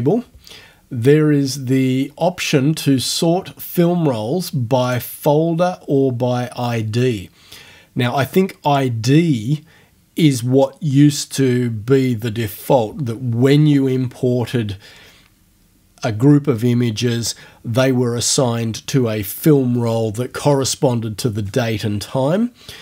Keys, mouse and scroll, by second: 4.9 click, 8.7 click.